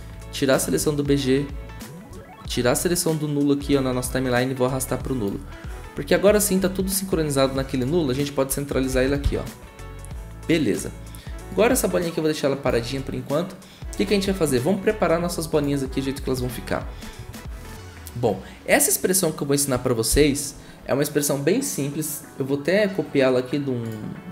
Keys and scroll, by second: 8.9 ctrl+alt+Home, 20.1 shift+`.